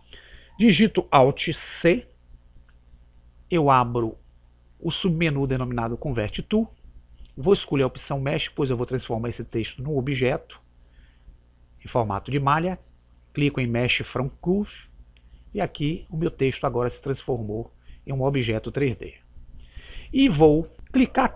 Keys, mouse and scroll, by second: 3.0 alt+c.